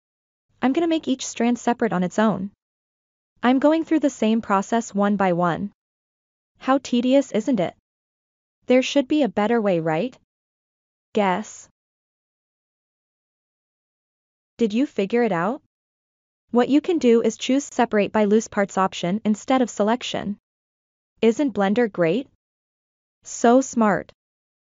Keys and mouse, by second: 1.3 l, 2.2 p, 3.8 l, 4.8 p, 6.5 l, 7.5 p, 9.2 l, 10.2 p, 11.3 l, 12.3 p, 14.0 l, 14.6 p, 15.7 l, 16.9 p, 18.7 l, 19.4 p, 20.8 l, 21.6 p, 23.0 l, 23.8 p.